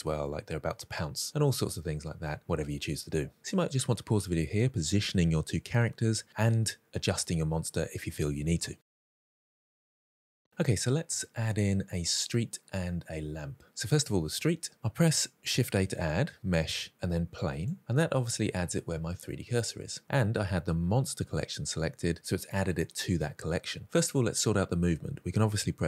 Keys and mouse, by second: 15.5 shift+a, 17.9-18.7 middle drag.